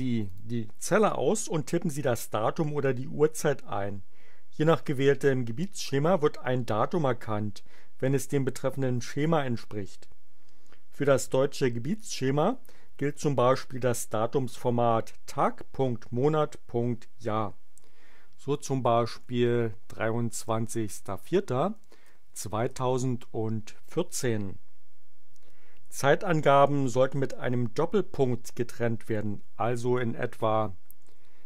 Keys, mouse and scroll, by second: 0.3 click, 19.2-22.8 typing, 30.6-31.4 typing.